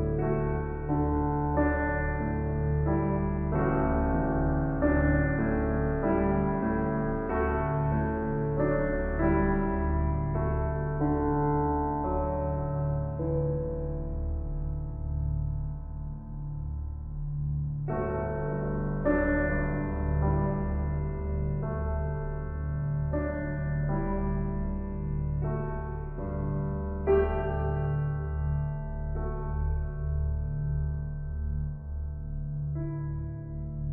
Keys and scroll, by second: 0.8 ctrl+u, 4.6 ctrl+t.